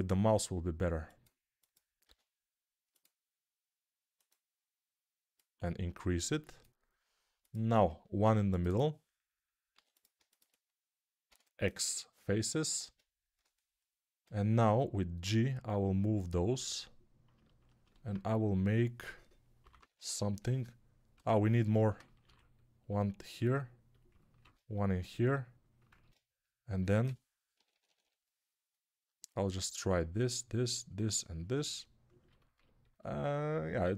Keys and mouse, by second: 1.4-4.9 ctrl+drag, 1.4 middle click, 1.9 ctrl+r, 4.9-15.9 middle drag, 8.1 ctrl+r, 9.6 3, 11.1 x, 12.6 ctrl+Tab, 14.1 g, 15.9-24.0 drag, 19.5 [, 19.6 [, 19.8 [, 21.0 Tab, 22.1 ctrl+r, 24.0-30.9 ctrl+middle drag, 24.4 ctrl+r, 25.8 ctrl+Tab, 26.9-33.9 typing, 30.9-33.9 drag.